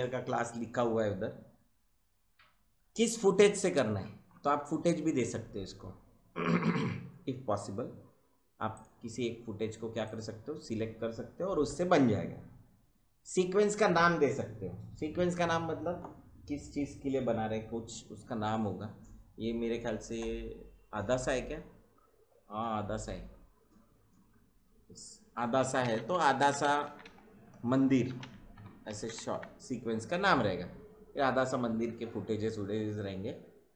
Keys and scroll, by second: 25.5-29.7 typing.